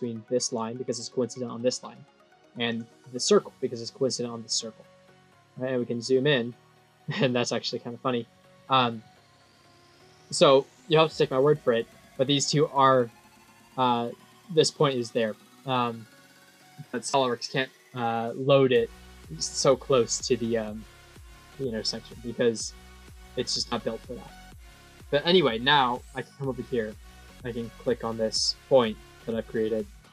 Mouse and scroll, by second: 0.3 click, 2.6 click, 3.0 click, 4.7-5.7 scroll up 13, 5.9 scroll, 7.1-8.0 scroll, 8.2-8.8 scroll up 3, 8.9 scroll down 1, 9.2 scroll up 1, 9.6 click, 10.7 scroll down 5, 11.4-11.9 scroll down 6, 13.6 click, 15.0 click, 15.3-15.8 scroll up 3, 17.1 scroll up 1, 21.2 middle click, 22.5 middle click, 23.3 middle click, 24.4 middle click, 26.0 click, 27.3 click.